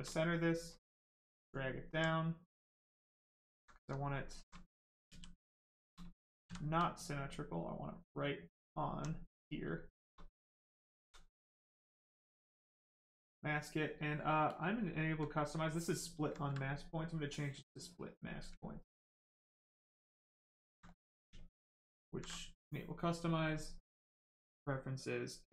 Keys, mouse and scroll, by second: 0.2 alt+right click, 0.9 alt+click, 2.0 right click, 3.5 alt+right click, 3.8 alt+right click, 4.0 alt+right click, 5.0 shift+f, 6.8 alt+f, 7.6 alt+click, 8.5 alt+click, 9.1 right click, 12.0 ctrl+click, 12.7 click, 15.6 ctrl+alt+click, 17.0 alt+click, 19.2 ctrl+alt+click, 21.4 click, 22.3 alt+click.